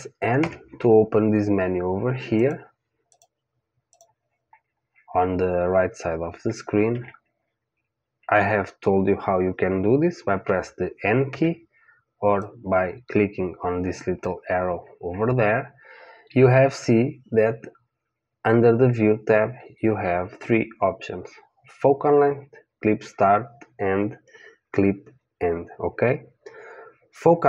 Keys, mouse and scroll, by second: 0.4 n, 2.3-6.0 drag, 6.9 n, 10.3 n, 11.3 n, 12.4 click.